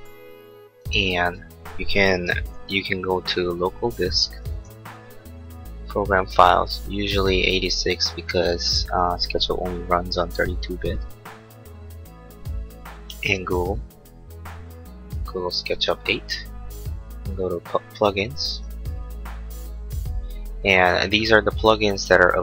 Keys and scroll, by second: 2.5 super+Left.